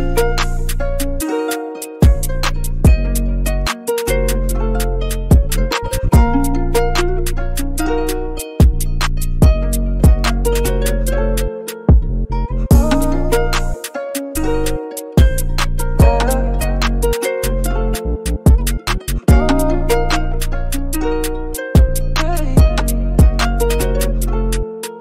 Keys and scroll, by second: 7.9 b, 12.1-12.6 typing, 15.0-15.8 typing, 16.9 super+z, 17.0-17.7 typing.